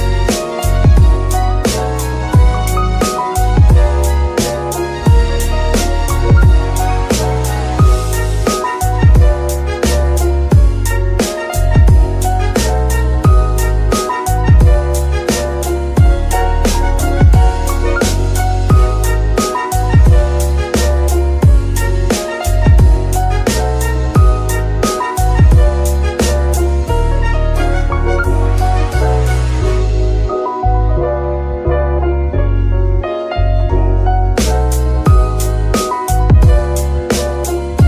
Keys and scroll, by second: 5.7 ctrl+Tab, 18.9 g, 19.1 Escape, 19.3 g, 19.6 Escape, 21.0 g, 21.1 Escape, 25.0 Escape, 27.3 r, 27.3 Escape, 29.5 g, 29.7 Escape, 31.1 z.